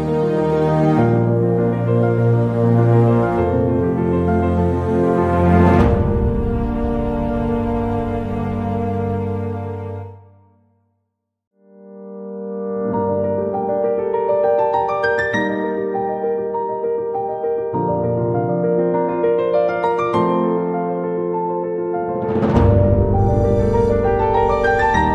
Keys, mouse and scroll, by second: 0.4 Tab, 2.4 g, 5.5 click, 7.4 g, 10.1 click, 10.9 click, 11.6 shift+a, 13.2 click, 14.6 click, 15.5 Tab, 15.7 shift+a, 18.5 s, 23.1 click.